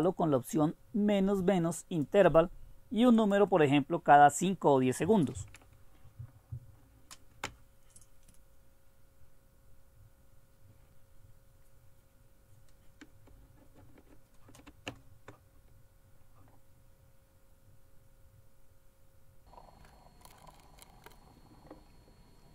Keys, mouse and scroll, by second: 0.4-2.4 drag, 3.5 click, 22.4 right click.